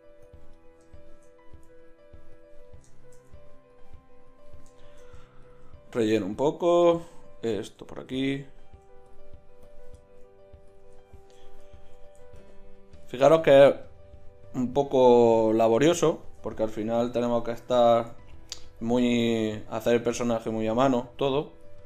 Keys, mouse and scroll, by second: 4.5-14.9 middle drag, 17.8 ctrl+z.